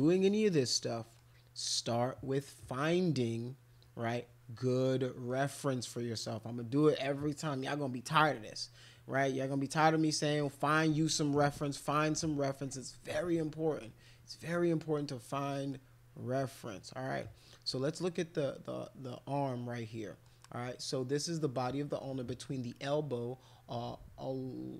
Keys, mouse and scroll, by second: 0.8 middle click, 5.3 middle click, 9.5 middle click, 11.0 middle click, 12.2 middle click, 12.8 middle click, 13.4 middle click, 14.1 middle click, 15.3 middle click, 17.1 middle click, 19.2-20.2 middle drag.